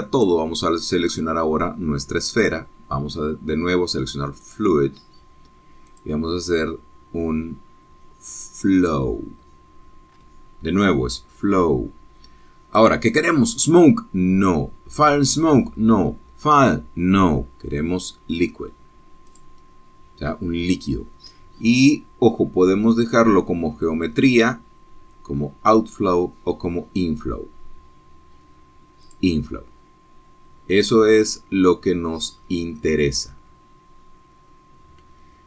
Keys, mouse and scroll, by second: 1.3 click, 5.6 click, 7.0 click, 10.0 click, 13.9 click, 20.5 click, 22.9 click, 30.3 click.